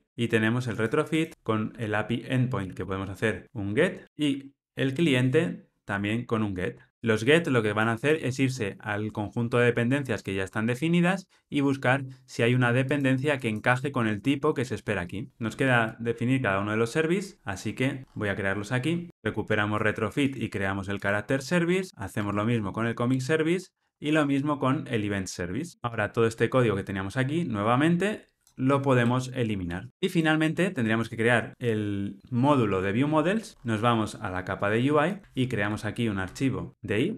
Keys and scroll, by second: 0.0 super+v, 5.9 Tab, 6.9 ctrl+alt+o, 19.1 Tab, 22.1 Tab, 29.9 ctrl+alt+o, 35.6 super+n.